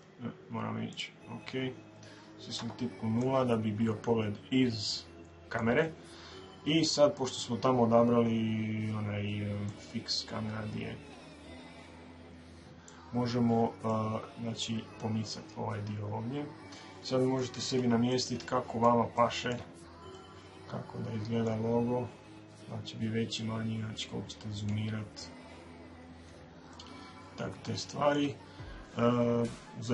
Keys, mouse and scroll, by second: 0.7-3.6 right drag, 2.4 KP_0, 9.4 click, 13.7-15.8 middle drag, 18.0-21.8 middle drag, 20.6 shift+scroll, 21.8-22.8 scroll up 1, 22.8-23.1 scroll up 1, 23.1-25.1 middle drag, 25.1-26.0 shift+scroll, 26.0-26.5 scroll up 1, 26.3 middle click, 26.5-28.5 middle drag.